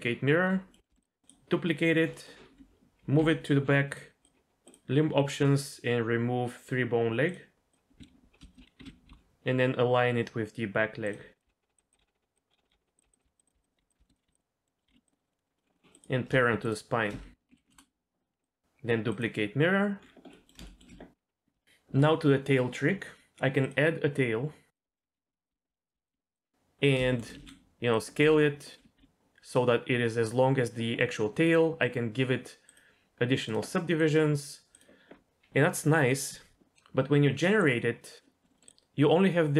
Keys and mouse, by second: 0.7 middle click, 0.9 shift+middle click, 1.0 click, 1.2 click, 2.1 middle click, 2.4 g, 4.2-7.7 drag, 8.0 KP_3, 8.4 shift+click, 8.8 g, 11.4-14.8 typing, 12.6 click, 12.9 click, 13.2 click, 13.7 click, 14.0 shift+middle click, 14.4 middle click, 14.7 middle click, 15.1 middle click, 15.6 middle click, 15.7 middle click, 16.6 shift+click, 17.5 ctrl+p, 18.4 click, 19.1 click, 20.3 middle click, 20.6 shift+middle click, 21.6 shift+middle click, 23.6-24.7 drag, 25.0-26.1 typing, 27.0 shift+click, 27.3 s, 28.2 g, 29.0 r, 31.4 click, 33.5-34.8 drag, 37.6 click, 38.4 middle click, 38.5 middle click.